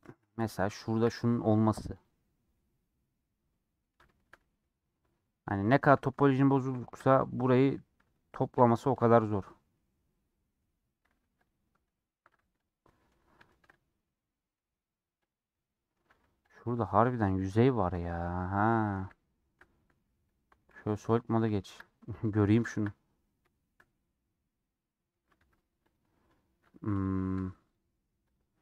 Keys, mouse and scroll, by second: 1.1 g, 2.2 scroll down 2, 2.4-4.6 middle drag, 4.6-5.4 scroll up 3, 5.4 scroll down 1, 5.6 middle click, 5.8 scroll up 1, 6.0 a, 6.2 scroll down 2, 6.4 shift+middle click, 7.2 2, 9.7-11.4 middle drag, 11.4 click, 11.8 middle click, 12.5 3, 12.8 middle click, 13.1 scroll up 2, 13.4-14.5 shift+middle drag, 14.5 scroll up 1, 15.3 click, 15.4 middle click, 16.1 3, 17.7 KP_Decimal, 18.4 scroll down 2, 18.7-20.6 middle drag, 20.6 z, 21.1-25.3 middle drag, 25.3 3, 25.8-28.5 drag, 28.5-28.6 shift+middle drag.